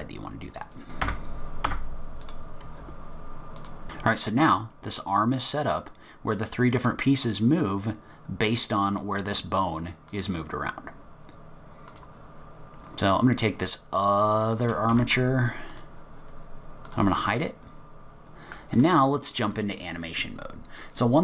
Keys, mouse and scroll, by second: 0.9 Tab, 1.0 click, 1.0 click, 1.0-3.8 typing, 1.3 middle click, 1.4 middle click, 1.6 click, 2.0 middle click, 2.0 shift+click, 2.1 shift+click, 2.1 shift+click, 2.2 ctrl+p, 2.2 scroll down 4, 2.3 click, 2.4 middle click, 2.5 click, 2.8 click, 2.9 click, 3.0 click, 3.1 click, 3.1 scroll up 8, 3.3 click, 3.4-4.2 scroll down 3, 3.5 Tab, 3.5 click, 3.6 Tab, 3.6 click, 3.7 click, 3.8 middle click, 3.8 click, 11.9 click, 13.6 click, 14.9 Tab, 15.7 click, 16.9 click, 17.7-18.2 scroll up 2, 18.2-19.3 scroll down 1, 19.4 click, 19.4-19.8 scroll down 1.